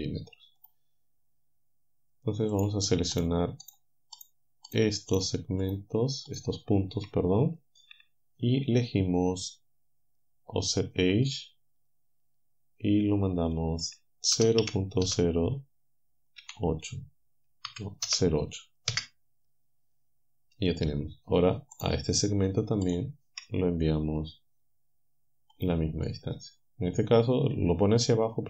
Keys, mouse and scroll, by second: 0.7 click, 2.6 click, 3.2 shift+middle click, 3.7 shift+right click, 4.2 shift+right click, 4.7 shift+right click, 5.2 shift+right click, 5.7 shift+right click, 6.3 shift+right click, 11.2 click, 13.5 click, 14.4 KP_0, 15.1 KP_0, 16.4 KP_8, 17.7 Left, 18.1 KP_0, 18.9 Return, 21.8 click, 22.9 shift+click, 25.6 click.